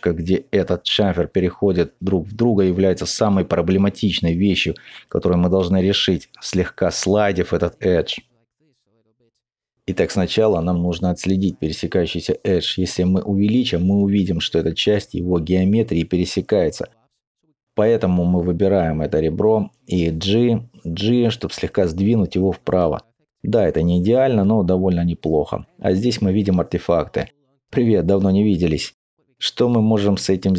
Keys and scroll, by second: 5.7 g, 12.0 alt+z, 16.5 Tab, 16.5 alt+z, 18.2 typing, 19.6-20.3 typing, 24.1 alt+n.